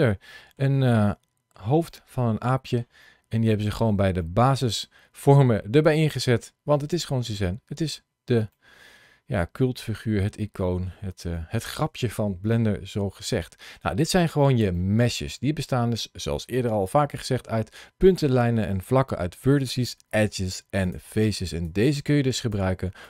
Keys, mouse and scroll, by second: 0.1 shift+middle click, 0.7 middle click, 1.8 middle click, 2.9-3.8 scroll down 3, 4.1 shift+middle click, 4.6-5.0 scroll down 2, 6.7 click, 7.6 scroll up 1, 8.2 scroll up 1, 8.4 shift+middle click, 9.8 middle click, 11.2 middle click, 12.2-13.5 scroll down 2, 15.5 middle click, 16.4 middle click, 17.0 middle click, 20.7 click, 21.5 click.